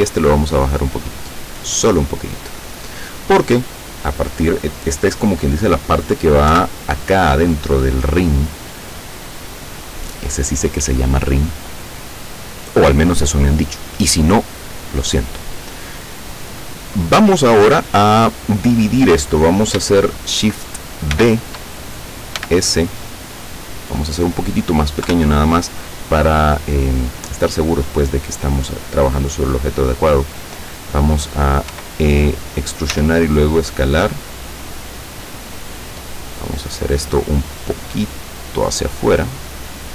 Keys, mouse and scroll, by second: 6.6 KP_7, 15.7-17.1 middle drag, 21.2 shift+d, 22.5 s, 23.9 click, 25.2 KP_7, 31.8 e, 33.0 s, 35.4 click, 36.1-37.2 middle drag, 37.5-39.9 drag.